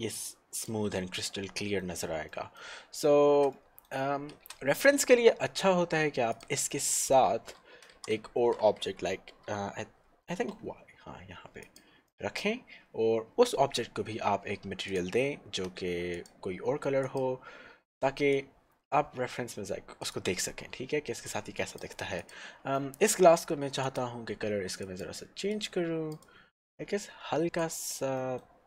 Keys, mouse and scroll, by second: 0.7 click, 0.9 middle click, 3.6 middle click, 4.4 shift+a, 6.3 click, 6.8 middle click, 7.4 scroll down 1, 7.9 g, 9.0 z, 10.6 y, 11.6 click, 12.2 middle click, 15.1 click, 18.3 click, 21.8 click, 22.9 middle click, 23.9 click, 28.3 middle click.